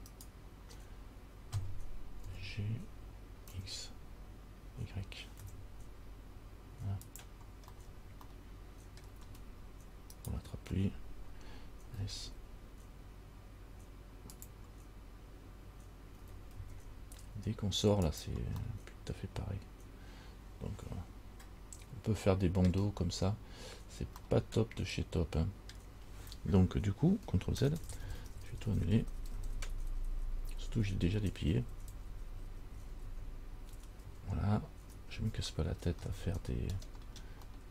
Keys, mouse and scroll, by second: 0.3 shift+right click, 2.4 g, 7.9-8.4 scroll down 2, 8.5 middle click, 10.4 alt+right click, 12.2 s, 16.4 g, 18.8 middle click, 19.6 middle click, 24.4 middle click, 27.9-29.2 ctrl+z, 29.4 ctrl+z, 29.6-30.1 ctrl+z, 30.3 ctrl+z, 30.5 ctrl+z, 30.6 ctrl+z, 30.8 ctrl+z, 31.0 ctrl+z, 31.1 ctrl+z, 31.4 ctrl+z, 31.6 ctrl+z, 31.8 ctrl+z, 31.9 ctrl+z, 32.1 ctrl+z, 32.3 ctrl+z, 32.5 ctrl+z, 32.7 ctrl+z, 33.0 ctrl+z, 33.3 ctrl+z, 34.2 ctrl+z, 35.2 ctrl+z, 35.5 ctrl+z, 36.4 ctrl+z, 37.2-37.7 scroll down 2.